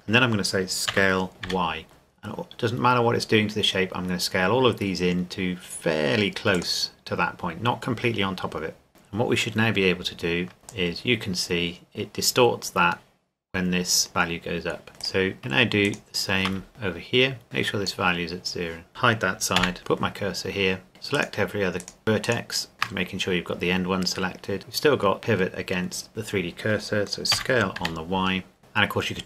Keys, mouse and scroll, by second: 0.9 s, 1.4 y, 6.6 click, 8.9 Tab, 10.6 Tab, 10.7 click, 15.0 right click, 15.4 shift+right click, 16.7 click, 18.9 Tab, 19.6 h, 20.9 shift+right click, 27.3 s, 27.8 y.